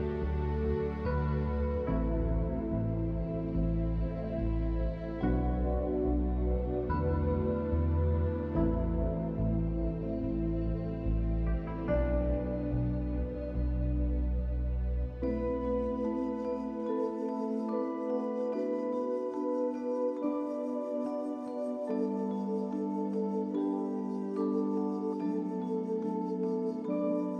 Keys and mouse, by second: 0.3 alt+shift+click, 0.8 alt+shift+click, 1.4 alt+shift+click, 3.2 click, 14.9 click, 15.4 shift+middle click, 15.9 middle click, 16.3 click, 16.5 click, 16.5 right click, 17.8 shift+click, 18.4 shift+click, 18.8 middle click, 20.3 shift+click, 21.4 shift+click, 22.3 shift+click, 22.6 click, 23.4 shift+click, 23.7 click, 24.5 shift+click, 24.9 click, 25.4 shift+click, 26.7 shift+click, 27.0 click.